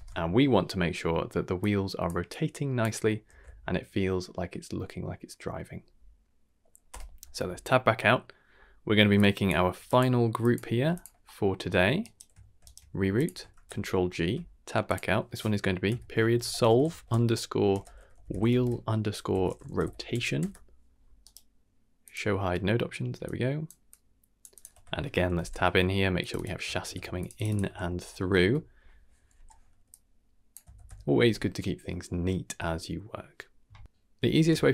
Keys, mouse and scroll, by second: 0.7-1.2 scroll down 4, 1.1 middle click, 1.6-2.0 drag, 2.3-2.8 drag, 3.0 scroll down 1, 3.3 ctrl+s, 6.9 Tab, 7.3-7.6 scroll down 2, 8.0 middle click, 8.5 scroll up 1, 8.7 middle click, 9.1-9.4 drag, 9.7 g, 10.4 click, 10.7 g, 11.2 middle click, 11.5-11.8 scroll up 2, 12.6 scroll up 1, 12.6 shift+right click, 13.0 g, 13.5 ctrl+g, 14.2 Tab, 14.8-16.8 drag, 17.9-20.4 drag, 21.2-22.1 right drag, 23.2 click, 23.9-24.4 drag, 24.5 click, 24.7 Tab, 25.3 n, 26.1-27.2 drag, 27.3-28.4 drag, 29.3 n, 29.9-30.5 drag, 30.7 ctrl+x, 33.8 click.